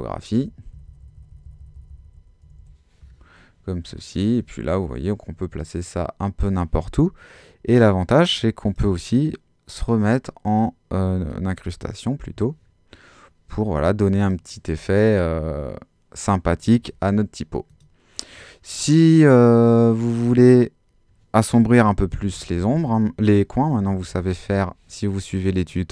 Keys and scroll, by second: 0.4 Up, 0.7 Down, 2.4 Up, 22.0 Down, 23.8 Left, 24.2 Down.